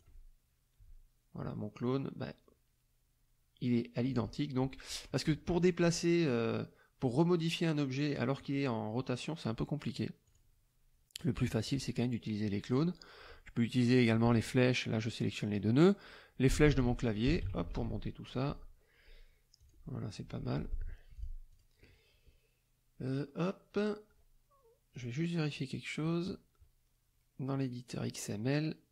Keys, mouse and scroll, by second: 1.6 middle click, 5.8 F2, 6.2 click, 10.2 click, 11.1 click, 15.0 click, 16.5 Up, 19.6 click, 20.2 F1, 20.5 middle click, 21.1 click, 21.5 click, 23.1 click, 24.9 click.